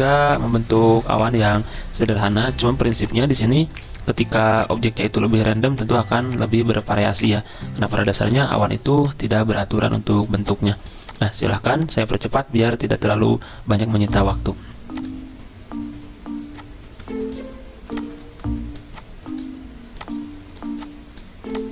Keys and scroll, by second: 8.6 ctrl+z.